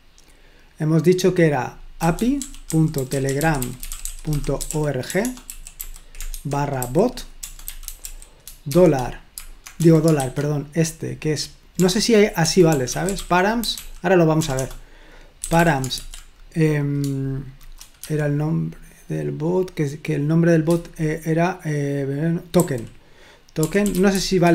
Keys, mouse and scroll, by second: 1.8-8.8 typing, 9.8-10.2 typing, 11.8-16.4 typing, 22.6 typing, 23.6-24.5 typing.